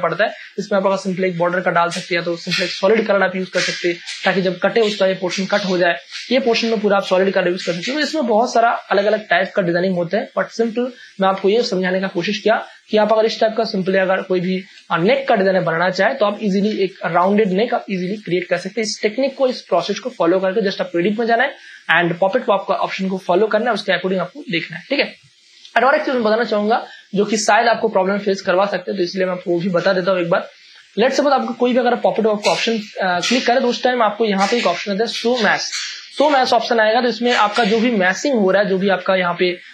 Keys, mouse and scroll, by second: 8.5 ctrl+d, 8.9 ctrl+space, 9.1 ctrl+click, 12.4 space, 12.7 ctrl+click, 12.7 ctrl+click, 13.2 v, 13.8 click, 16.7 Up, 20.9 click, 24.8 click, 25.6 ctrl+space, 25.7 ctrl+click, 26.1 v, 29.1 click, 35.4 click, 36.8 ctrl+space, 37.0 ctrl+click, 37.3 ctrl+space.